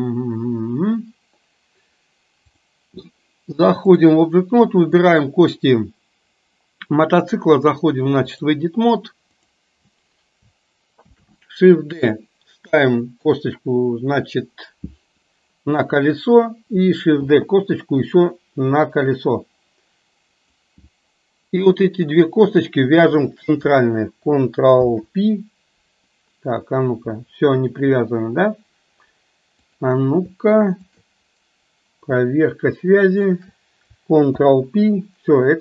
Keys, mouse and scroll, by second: 2.5 click, 4.9 click, 7.2-8.6 drag, 9.4 click, 11.1 shift+d, 17.3 shift+d, 22.1 shift+click, 23.1 shift+click, 24.7 ctrl+p, 33.1 shift+click, 34.4 ctrl+p.